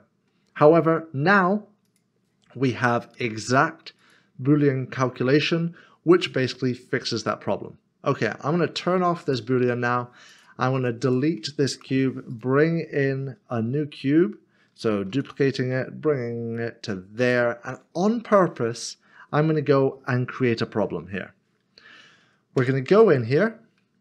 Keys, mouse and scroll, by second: 1.8 click, 4.0 click, 9.2 click, 11.8 Delete, 12.3 click, 15.1 d, 17.2 d, 18.3 click, 22.6 click, 23.3 Tab.